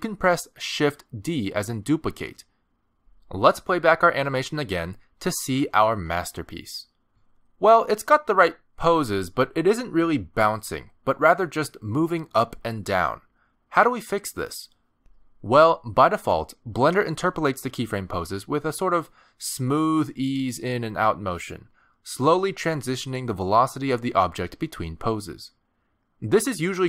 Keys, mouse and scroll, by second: 0.7 shift+d, 5.5 space, 7.7-8.2 scroll down 2, 8.3 shift+middle click, 8.8-9.2 scroll down 1, 9.2 middle click, 9.8 middle click.